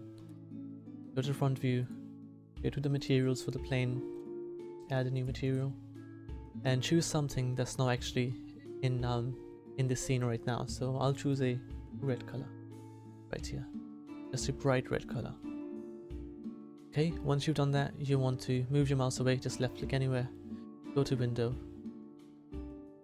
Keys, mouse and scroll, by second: 3.0-8.0 drag, 8.0 shift+z, 22.8 click.